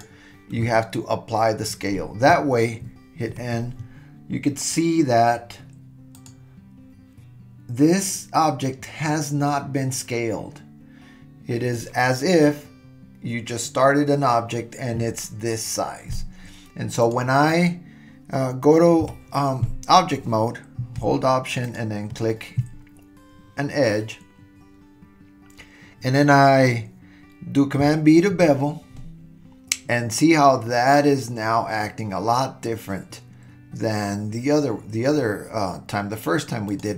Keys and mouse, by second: 3.3 n, 6.3 click, 19.0 Tab, 28.3 super+b.